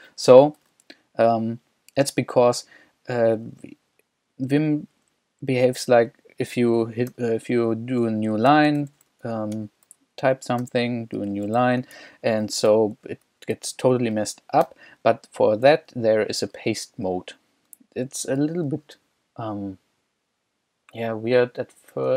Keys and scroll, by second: 3.3 k, 4.1 k, 4.7 k, 7.1 o, 8.3-9.4 typing, 9.6 Escape, 10.6-12.7 typing, 12.2 Escape, 14.8 u.